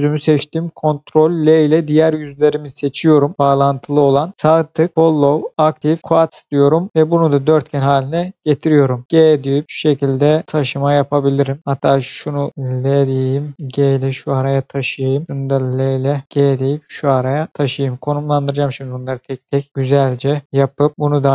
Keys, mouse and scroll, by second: 1.2 ctrl+l, 4.3 right click, 6.3 click, 6.9-7.3 scroll down 1, 8.9 g, 10.5 click, 11.0-11.6 scroll down 1, 11.6-12.8 scroll up 1, 12.8 l, 13.7 g, 14.8 click, 15.6 click, 16.2 g, 17.5 click, 18.1-18.5 scroll down 1, 18.5-19.4 scroll up 1, 19.7 shift+middle click, 20.4 scroll up 1, 20.7 shift+middle click, 20.9 click.